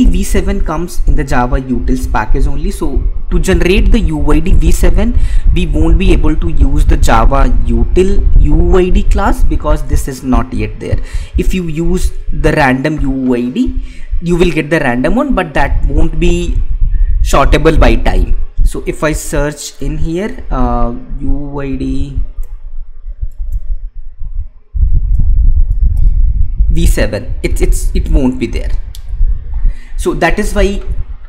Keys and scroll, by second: 21.1 ctrl+s, 24.2 ctrl+f, 29.5 Escape.